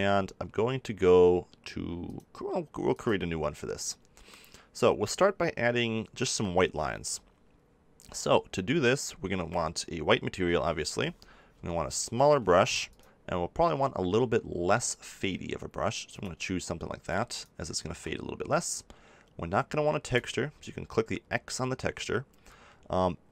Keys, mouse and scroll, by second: 2.8-4.5 drag, 11.5 f, 12.9-14.8 drag, 17.8 ctrl+z, 18.7-23.3 drag.